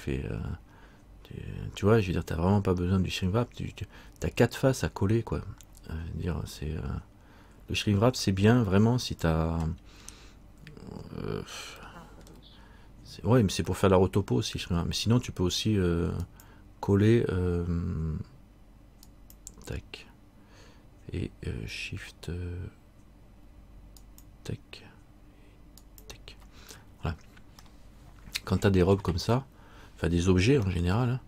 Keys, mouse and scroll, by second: 9.2 click, 10.2-11.9 scroll up 2, 11.9 scroll up 1, 12.0 shift+middle click, 13.1-13.5 scroll down 1, 13.9 middle click, 16.4 click, 24.2 shift+click, 27.0-27.7 scroll up 2, 27.7 scroll up 1, 27.9 middle click, 29.5-30.2 scroll up 1, 30.9 shift+middle click.